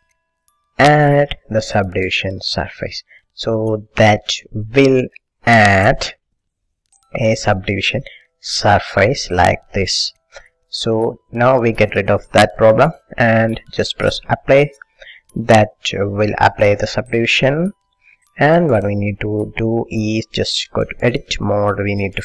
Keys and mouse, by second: 0.3 middle click, 3.2 middle click, 4.2-10.3 middle drag, 14.4 click, 15.8-17.5 middle drag, 17.7 middle click, 18.5-20.1 middle drag, 21.1-22.2 drag.